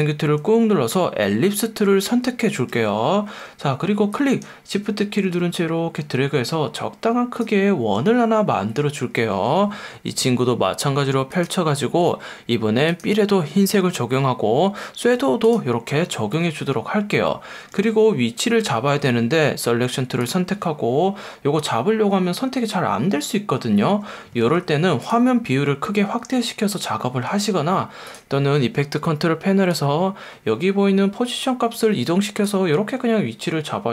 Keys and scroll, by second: 2.9 F1, 9.9 F1, 15.0 F1, 16.4 F1, 17.7 F1, 24.4 F1, 27.3 F1.